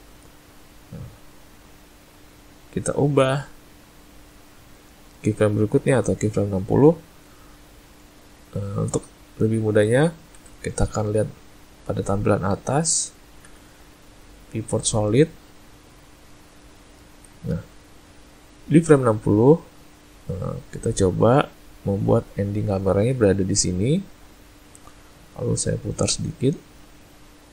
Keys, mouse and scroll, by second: 1.4 click, 13.5 z, 15.9 ctrl+middle click, 21.2 click.